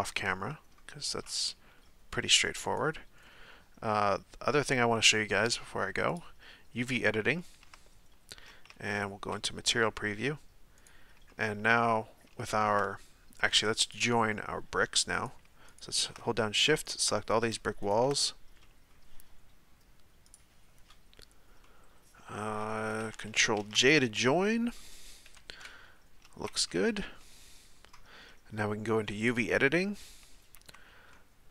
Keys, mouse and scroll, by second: 0.2-2.7 middle drag, 2.7 right click, 3.3-6.1 middle drag, 6.1 click, 7.3-8.7 shift+middle drag, 8.7 z, 10.8 right click, 11.3-11.8 shift+middle drag, 11.8-12.4 scroll up 1, 12.4-13.9 shift+middle drag, 13.9-15.1 drag, 15.1 right click, 15.7 shift+right click, 16.2-16.8 middle drag, 16.8 shift+right click, 17.2-17.8 middle drag, 17.8 shift+right click, 18.6-23.6 middle drag, 23.6 ctrl+j, 24.5-25.3 middle drag, 25.3 KP_7, 27.2-29.2 middle drag, 29.2-30.5 drag, 30.5 a, 31.1-31.5 middle drag.